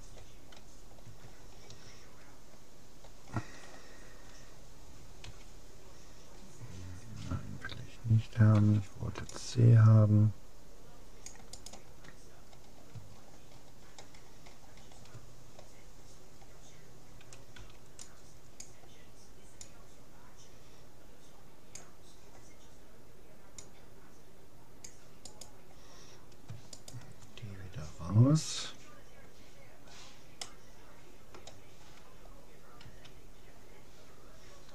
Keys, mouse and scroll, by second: 1.2-5.2 middle drag, 5.4 x, 8.6 c, 12.6-18.4 middle drag, 17.6 c, 26.8-28.4 right drag, 29.8-32.0 middle drag, 32.8 a.